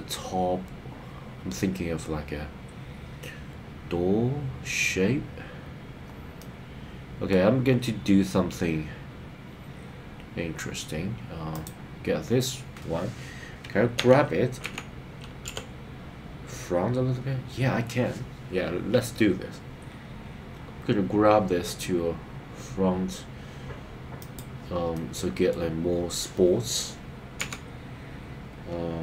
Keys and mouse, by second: 6.4 middle click, 13.9 g, 14.7 x, 15.5 y, 24.2 click, 24.9 middle click, 27.4 KP_3.